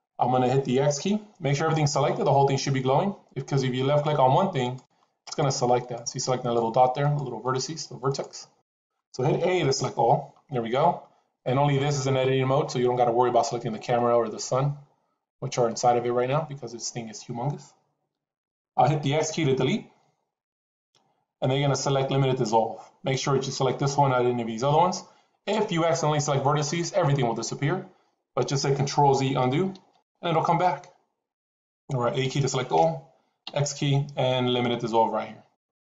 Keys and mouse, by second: 3.8 click, 5.2 click, 5.7 click, 6.3 click, 6.9 click, 8.0 click, 8.5 click, 9.7 a, 19.9 x, 29.7 ctrl+z, 32.1 a, 33.3 x.